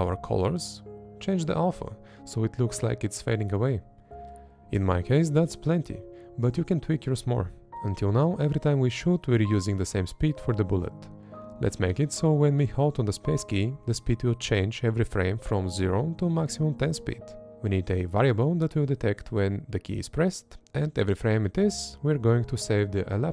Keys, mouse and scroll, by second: 1.0 Up, 4.5 Up, 5.2 Up, 7.3 Up, 9.7 space, 10.5 Left, 12.1 Right, 14.1 space, 15.0 Left, 16.2 Up, 16.7 Up, 17.2 Up, 17.6 Up, 21.2 Left, 22.7 Right.